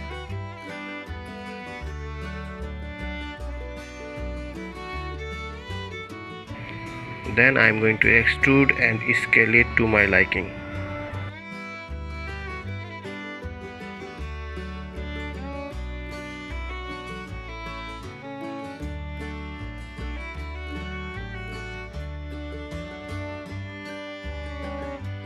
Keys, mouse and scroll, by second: 1.0-2.5 drag, 2.8 middle click, 3.5 s, 5.6-8.3 drag, 8.3-9.7 middle drag, 9.7 e, 16.8 s, 22.5 middle click, 23.0 e.